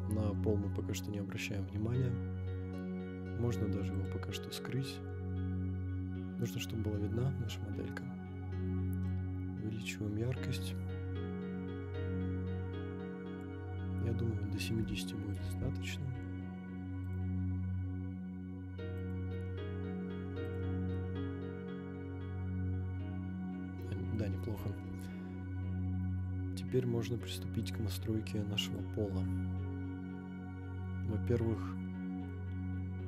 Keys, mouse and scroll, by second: 0.0 scroll down 1, 1.6 scroll up 1, 3.9 click, 5.0 scroll up 1, 5.4-6.0 scroll down 2, 9.0-15.5 drag, 17.0 click, 19.0 click, 20.4 click, 20.9-24.2 middle drag, 24.9 KP_0, 27.6 click, 28.6 click, 31.0 scroll up 2, 31.5-32.3 middle drag.